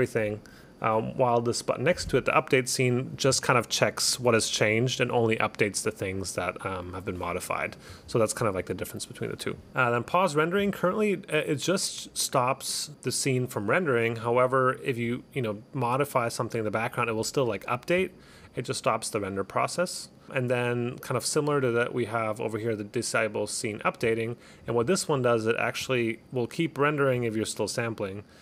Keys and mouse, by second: 10.2 click, 15.2 click, 20.2 click, 23.9 click.